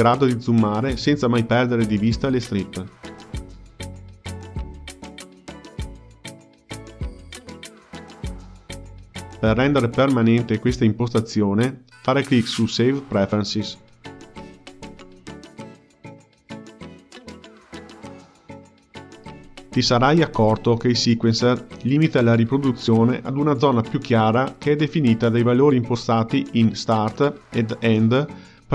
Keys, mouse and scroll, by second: 1.6-4.7 ctrl+middle drag, 19.1 click, 21.0-23.9 middle drag, 23.9-24.8 drag, 24.8 space, 28.3 space, 28.6 drag.